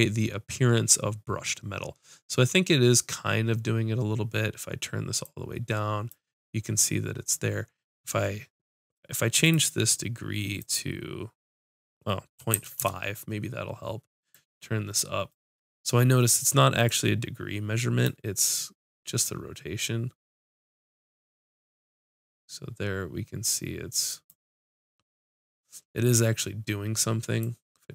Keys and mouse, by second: 5.2-12.8 drag, 8.8 right click, 14.3-16.8 drag, 16.9-20.8 drag, 25.6-27.9 drag.